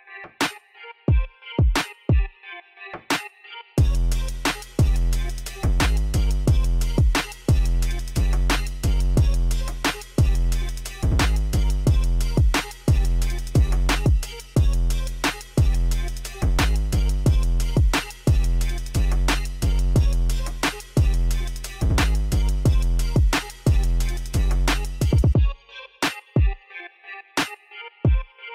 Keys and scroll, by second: 8.3 shift+a, 8.7 n, 8.8 o, 9.2 i, 11.8 5, 11.9 Tab, 12.0 1, 12.1 Tab, 12.7 ., 12.8 6, 13.1 Return, 16.2 ., 16.6 5, 16.8 Return, 22.9 shift+a, 23.9 Tab, 24.2 s, 24.3 2, 25.0 Return, 25.5 Tab, 25.8 7, 26.4 g, 28.1 Tab.